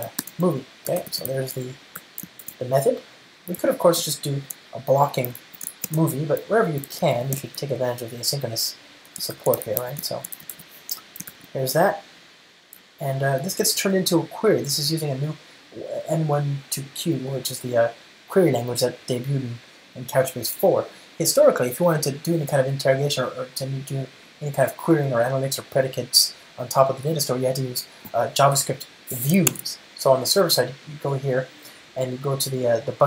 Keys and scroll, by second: 2.5 alt+super+l, 4.3 ctrl+alt+shift+Right, 9.4 Return, 11.7 alt+super+l.